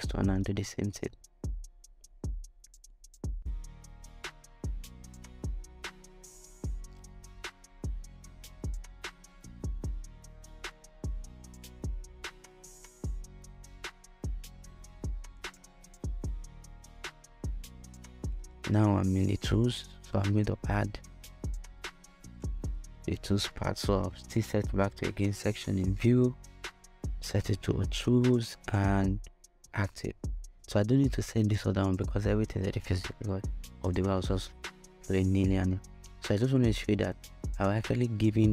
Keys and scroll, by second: 33.1 shift+Return.